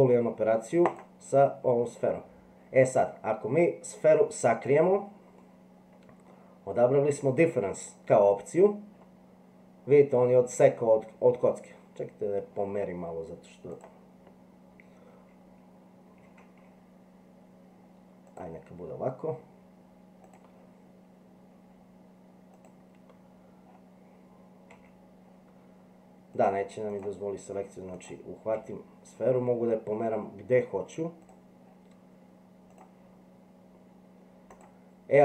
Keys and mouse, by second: 4.7 click, 5.4 middle click, 10.0-12.4 middle drag, 13.7 click, 16.1 g, 22.5 click, 24.7 g, 26.4 click, 26.9 click, 28.0 click, 28.5 g.